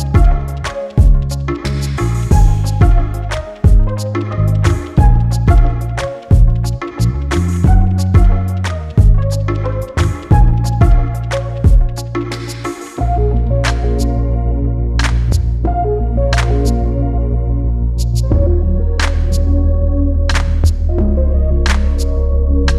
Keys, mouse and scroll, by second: 6.5 click, 9.2 click, 10.0 Delete, 10.9 KP_1, 11.0 Return, 12.2 click, 12.7 scroll down 1, 12.9 scroll up 1, 13.5 click, 13.8-14.2 scroll down 1, 15.1 click, 15.3 scroll up 1, 15.7 click, 15.8-16.2 scroll down 1, 16.3 click, 16.8 right click, 17.7 click, 18.1-18.5 scroll down 1, 18.5 click, 19.6 click, 20.6 Delete, 22.6 click.